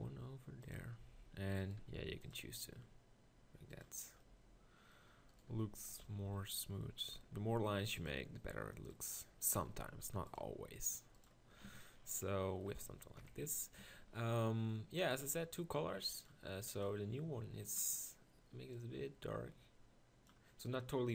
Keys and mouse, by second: 1.8 ctrl+r, 5.6 ctrl+r, 7.6 ctrl+r, 9.8 ctrl+r, 11.7 Tab, 13.2 KP_1, 13.4 Tab, 13.9 Tab.